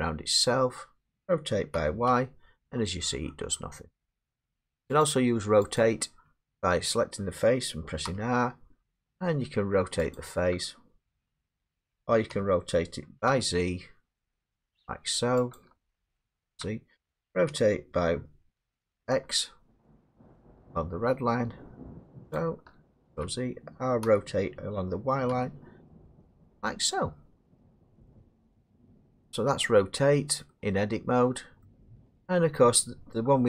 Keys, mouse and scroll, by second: 1.7 r, 2.1 y, 4.2 click, 4.6 ctrl+z, 4.6 click, 5.0 click, 5.8 click, 8.1 r, 10.1 click, 11.1 ctrl+z, 12.3-13.3 typing, 15.6 click, 16.4 ctrl+z, 17.5 r, 19.1 x, 22.3 click, 23.0 ctrl+z, 24.0 r, 25.3 y, 28.2 click, 28.6 ctrl+z, 30.3 middle click, 31.1 middle click, 31.6 scroll down 2, 32.2 scroll down 1, 32.7 scroll down 1, 33.3 scroll down 4.